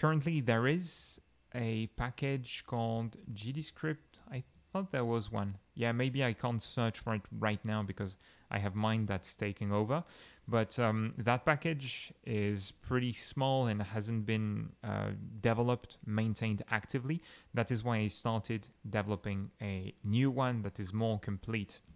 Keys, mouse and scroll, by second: 0.0-3.6 typing, 7.9 Escape.